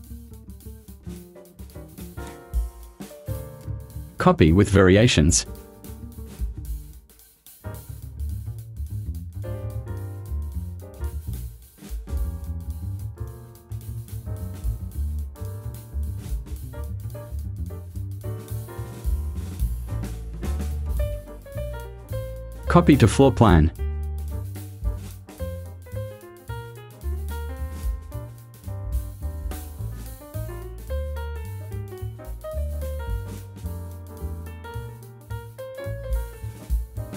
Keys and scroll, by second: 3.1 o, 10.3 o, 13.5 v, 18.5 r.